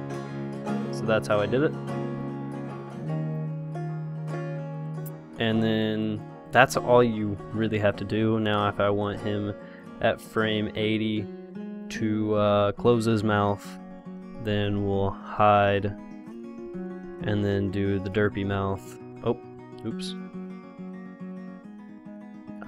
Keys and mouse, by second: 1.7-8.7 drag, 10.1-12.0 drag, 14.9-16.9 drag, 15.1 i, 16.9 i, 18.9 i.